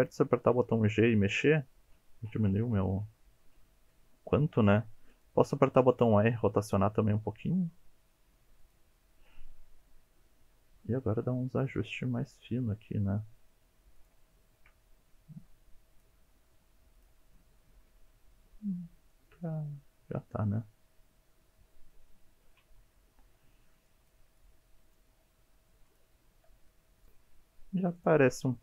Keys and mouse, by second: 5.1 click, 5.7 r, 6.7 click, 6.8 g, 8.6 click, 11.1 click, 11.8 g, 14.0 click, 14.4 shift+middle click, 15.0 click, 15.4 g, 15.7 click, 16.8 shift+middle click, 16.9-18.1 middle drag, 18.4 KP_1, 19.1 click, 19.4 click, 19.8 g, 20.1 click, 20.3 r, 20.6 click, 20.9 click, 22.1 alt+z, 23.3 click, 23.8 g, 25.4 click, 25.7 r, 26.4 click, 28.0 click.